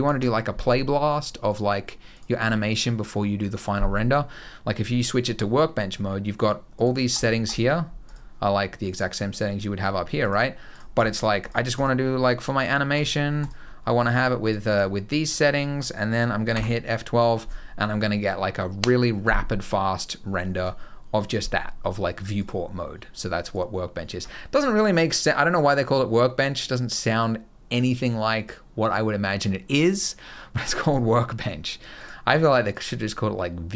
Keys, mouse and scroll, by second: 1.2 click, 1.9 click, 6.5 click, 7.2 click, 7.8 click, 8.6 click, 10.5 click, 10.7 click, 11.1 click, 11.5 click, 12.7 click, 13.9 click, 14.2 click, 14.4 click, 16.4 F12, 23.3 click, 31.7 click.